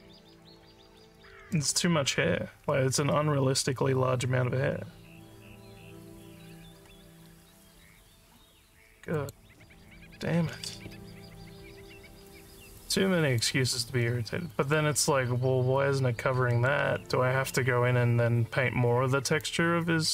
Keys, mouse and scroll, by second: 6.5 scroll down 2, 7.1 scroll down 2, 7.9 scroll up 1, 9.2 click, 12.8 alt+click, 14.1 alt+middle click, 14.6 alt+click, 16.6 alt+middle click, 19.4-20.1 alt+drag.